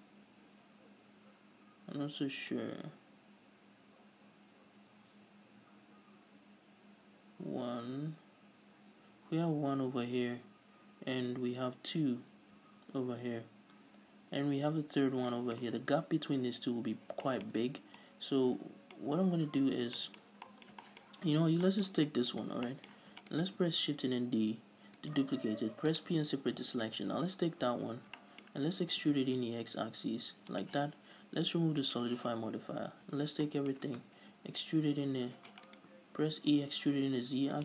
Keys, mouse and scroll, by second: 15.2 scroll down 2, 17.0 scroll up 2, 17.8 scroll up 2, 19.1-19.8 scroll up 2, 19.8 scroll down 2, 21.2-21.8 scroll up 2, 22.5 alt+right click, 22.8 shift+middle click, 23.6 alt+right click, 24.3 shift+d, 25.3 right click, 25.7 p, 26.5 Tab, 27.0 right click, 27.4 scroll down 1, 27.5 Tab, 28.0 a, 28.4-30.7 shift+middle drag, 29.2 e, 30.7 shift+click, 32.0 click, 32.5 scroll down 1, 33.0 a, 33.3-35.9 middle drag, 33.3 scroll down 2, 34.9 z, 35.9 right click, 36.5 e.